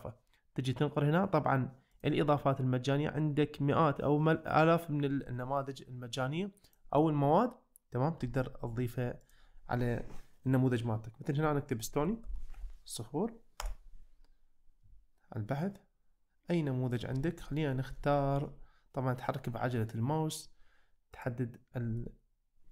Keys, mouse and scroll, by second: 2.0 click, 6.7 click, 9.2-13.7 drag, 21.2 click, 22.0-22.7 middle drag.